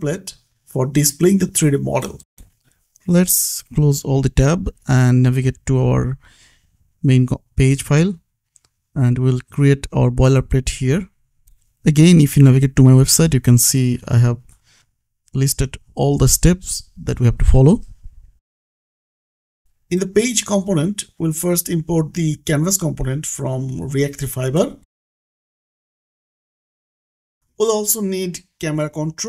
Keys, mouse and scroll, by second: 2.6 click, 7.9 click, 8.6-10.6 scroll down 1, 11.2 click, 13.8 click, 15.9 click, 17.5 Return, 18.3-21.9 typing, 22.6 Return, 24.1 click, 27.0 click, 29.1 click.